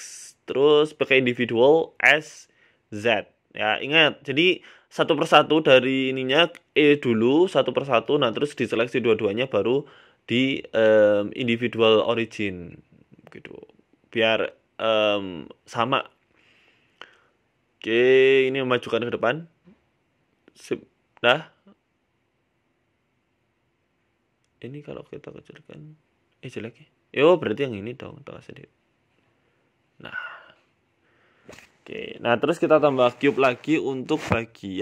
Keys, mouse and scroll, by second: 0.8 click, 1.6 s, 5.3 s, 7.3 right click, 7.6 s, 9.9 middle click, 10.3 shift+middle click, 10.6 scroll up 3, 10.8 shift+middle click, 11.3 shift+right click, 11.5 shift+middle click, 12.3 e, 14.0 shift+middle click, 14.8 right click, 15.3 s, 17.0 e, 17.2 s, 18.5 KP_3, 19.3 g, 21.0 scroll up 1, 21.2 middle click, 21.2 scroll down 4, 21.6 a, 21.7 a, 21.9 middle click, 23.8 right click, 24.5 shift+right click, 25.2 s, 27.5-28.1 scroll up 2, 28.5 right click, 28.8 s, 30.3 Tab, 30.5 scroll down 7, 30.7 middle click, 31.2 scroll up 1, 31.3 scroll down 1, 31.9 Tab, 32.1 middle click, 32.3 scroll up 1, 32.4 shift+a, 33.2 scroll down 2, 33.2 middle click, 33.6 s.